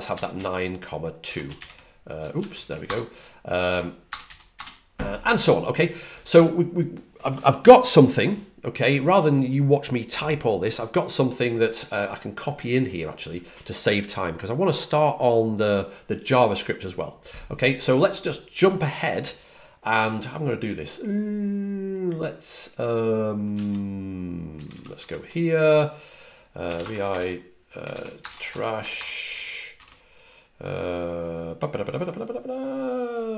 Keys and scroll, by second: 0.0-1.1 typing, 2.4 shift+super+Right, 3.6 ,, 4.0 BackSpace, 4.1 ;, 4.4 Return, 24.4 super+Tab, 24.4 super+Right, 27.9-29.6 typing.